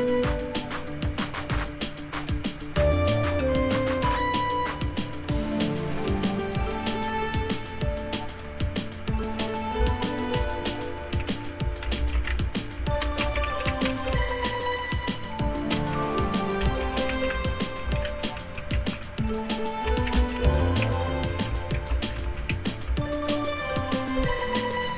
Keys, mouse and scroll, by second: 2.1 click, 6.1-8.5 drag, 9.3 click, 10.4-11.5 drag, 11.6-14.7 typing, 15.7-23.0 typing.